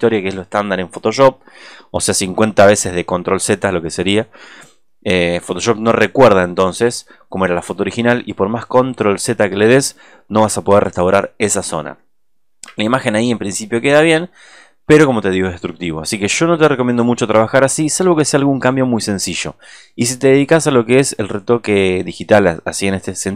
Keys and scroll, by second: 10.6 space, 11.9 alt+space.